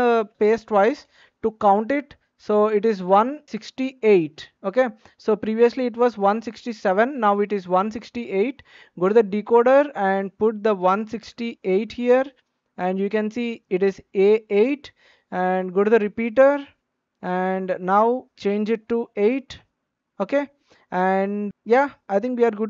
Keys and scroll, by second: 1.0 space, 11.3 BackSpace, 11.6 KP_8, 18.9 BackSpace.